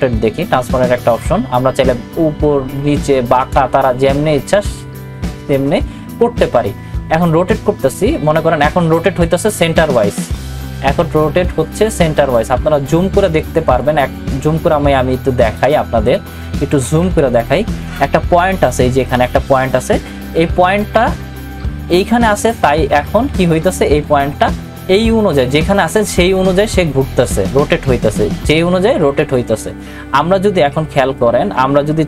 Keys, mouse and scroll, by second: 13.8-16.8 drag, 16.8 ctrl+=, 23.7 ctrl+=, 25.3-26.3 scroll up 1, 26.3-32.0 drag.